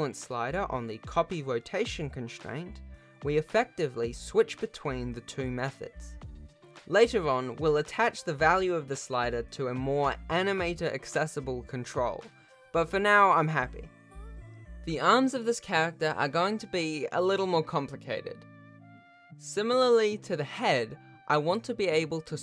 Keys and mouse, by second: 0.1 r, 1.9 click, 4.2 r, 12.6 ctrl+s, 14.7 Tab, 15.1 click, 16.3 shift+click, 17.7 shift+d, 22.2 shift+click.